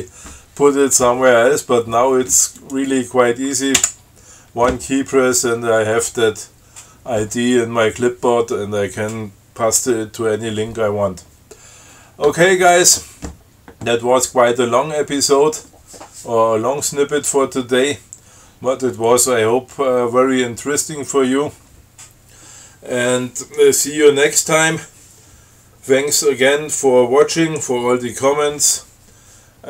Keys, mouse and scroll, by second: 2.8 click, 4.0 F5.